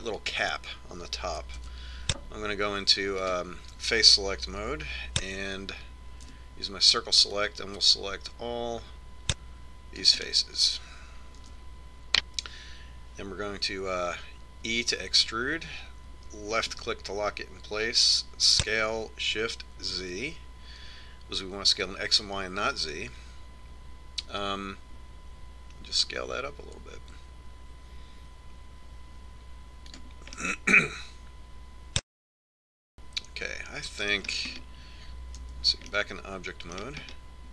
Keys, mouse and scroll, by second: 3.5 ctrl+Tab, 6.5 z, 8.1 c, 12.1-14.1 right drag, 13.3 z, 16.7 e, 20.4 s, 32.4-34.2 middle drag, 36.4 Tab.